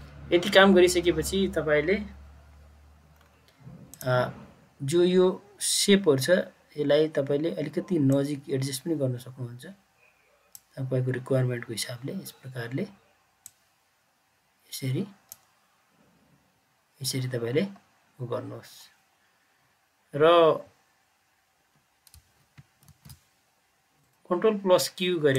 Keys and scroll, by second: 22.8 ctrl+q.